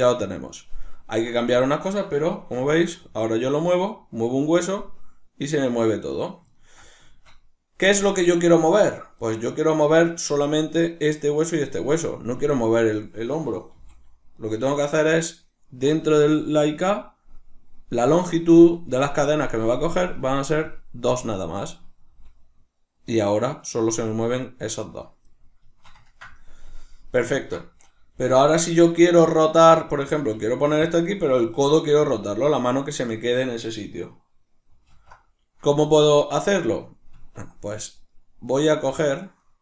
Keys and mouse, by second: 0.5-6.3 ctrl+middle drag, 2.5 g, 6.3 right click, 6.6-14.5 ctrl+middle drag, 13.8 g, 15.0 right click, 20.2-21.6 drag, 21.6 right click, 22.1 g, 25.0 right click, 25.7-30.9 shift+middle drag, 28.3 g, 29.5 right click, 30.2 g, 30.9 click, 34.9 alt+g, 36.6-38.0 middle drag, 37.1 Tab, 38.0 right click, 38.4 right click, 38.9 right click, 39.3 right click, 39.4 right click.